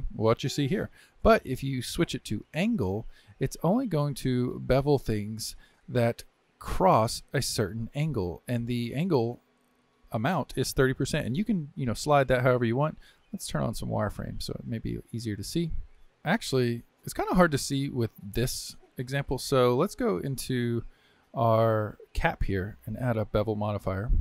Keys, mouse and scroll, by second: 1.2-4.3 drag, 4.6-7.6 drag, 13.5-15.2 drag, 15.2 scroll up 2, 16.3-20.1 drag, 20.1 Tab, 20.9 Tab, 21.8 click, 23.4 click.